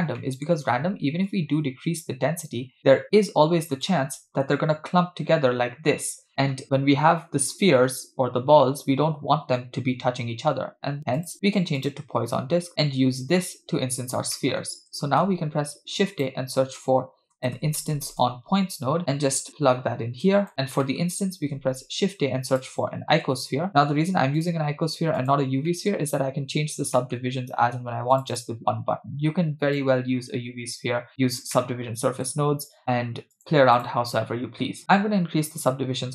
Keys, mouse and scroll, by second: 0.2 middle click, 1.3-4.0 shift+drag, 4.4 scroll up 3, 11.2-11.9 drag, 12.7-13.4 middle drag, 12.7-13.4 scroll down 4, 14.4 middle click, 15.1 shift+a, 20.2 click, 20.8 scroll down 2, 20.8 middle click, 21.4 shift+a, 25.7 middle click, 26.1-26.8 scroll up 2, 26.9 middle click, 28.2 click, 29.9-31.2 drag, 31.6 middle click, 32.5-33.0 scroll up 1, 33.4 click.